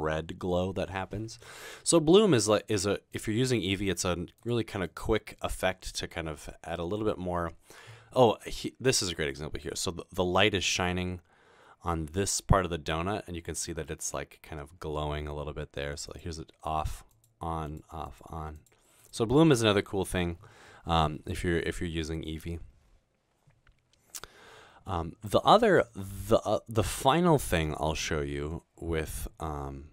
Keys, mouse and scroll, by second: 3.1 click, 3.6 click, 4.9 click, 5.6-6.6 scroll down 2, 6.6 middle click, 16.1 click, 17.1 click, 17.7 click, 18.1 click, 19.0-19.5 drag.